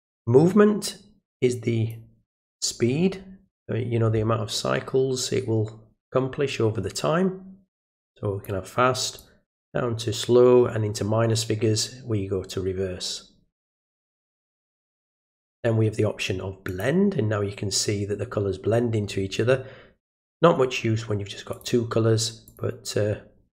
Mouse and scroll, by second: 0.1-1.9 drag, 7.8 click, 9.2-15.5 drag, 16.6 click, 21.5 click, 22.4 click.